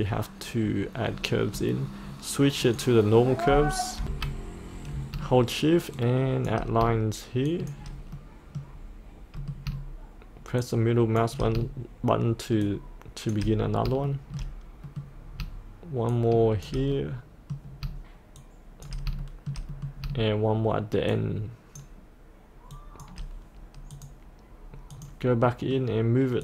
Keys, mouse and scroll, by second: 0.6-2.6 scroll down 1, 2.6 click, 4.0 F8, 7.5 shift+click, 8.2 middle click, 10.7 shift+click, 12.7 shift+click, 13.6 scroll up 1, 14.8 middle click, 16.1 shift+click, 16.9 middle click, 18.4 shift+click, 19.2 shift+middle click, 21.1 shift+click, 23.9 click, 25.5 middle click.